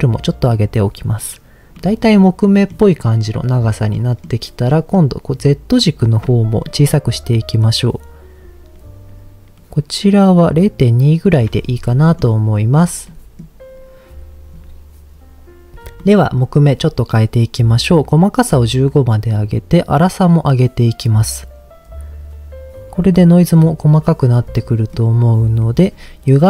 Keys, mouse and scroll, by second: 1.7 middle click, 3.0 middle click, 3.9 middle click, 4.4 scroll up 1, 4.6 middle click, 5.6 scroll up 1, 6.8-11.3 shift+drag, 11.8 middle click, 12.7 scroll down 2, 13.0 middle click, 16.0 middle click, 18.0 click, 19.2-24.0 drag, 24.4 middle click, 25.6 middle click.